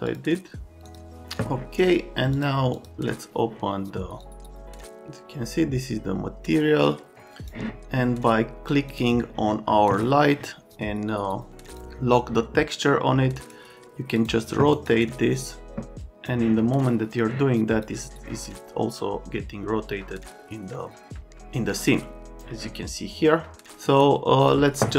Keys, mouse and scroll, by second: 0.1 click, 0.8 click, 2.3 click, 2.7 click, 4.2 click, 7.1 click, 8.9 click, 11.7 click, 13.4 scroll, 14.2 click, 14.7 scroll, 15.4 click, 15.8 click, 17.2 click, 23.9 scroll, 24.4 middle click.